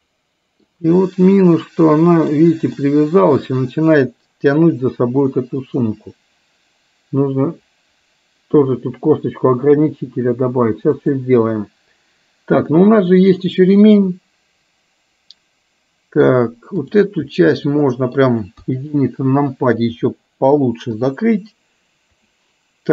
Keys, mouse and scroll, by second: 0.9-2.3 middle drag, 2.8-9.8 middle drag, 11.1 click, 12.8-16.3 middle drag, 16.8 click, 17.6 middle click, 18.7 KP_1, 21.1 r.